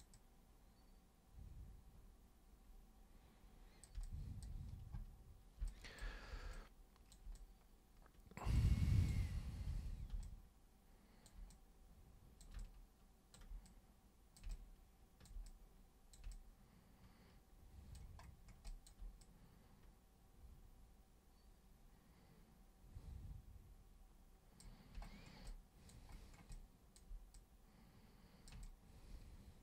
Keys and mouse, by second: 0.2-3.8 super+drag, 4.1 alt+super+click, 5.6 super+b, 5.7 click, 6.6 alt+super+click, 7.4-8.6 super+drag, 8.7 super+click, 9.8 super+3, 10.2-11.3 alt+super+drag, 11.5 super+click, 12.6 alt+super+click, 13.7 super+click, 14.5 alt+super+click, 15.5 super+click, 16.3-18.0 alt+super+drag, 18.7 alt+click, 19.2-24.6 drag, 25.5 alt+click, 26.5 alt+click, 27.3-28.5 drag, 28.6-29.6 alt+drag.